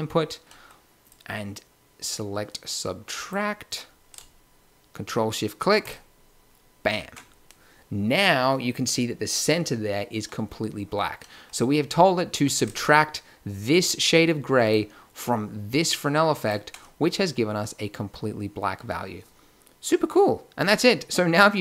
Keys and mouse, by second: 12.7-14.4 drag, 14.6 click, 18.2-21.6 middle drag.